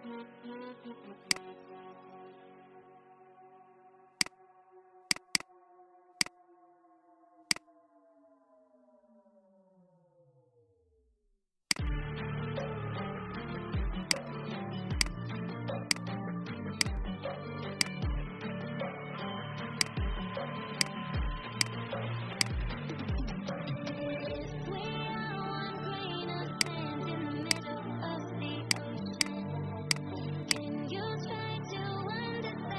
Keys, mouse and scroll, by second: 1.1 click, 2.7-4.1 scroll down 1, 4.1 click, 7.4 shift+click, 9.9-10.2 alt+scroll up 1, 11.5 click, 18.8 ctrl+x, 19.7 click, 22.9 Delete, 24.2 ctrl+f, 26.4 click, 31.9 alt+scroll down 1.